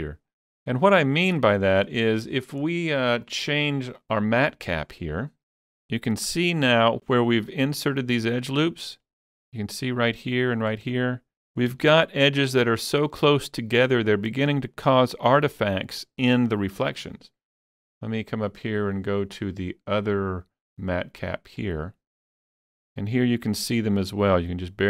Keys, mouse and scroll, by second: 1.1-3.1 shift+middle drag, 1.1 scroll up 1, 1.8 click, 3.1 click, 4.6 click, 5.6-7.2 middle drag, 7.2-14.6 shift+middle drag, 11.7 Tab, 13.9 Tab, 14.6-16.7 middle drag, 18.5 Tab, 18.5-21.6 middle drag, 19.4 click, 19.4 click, 21.6 click, 22.3-24.8 middle drag.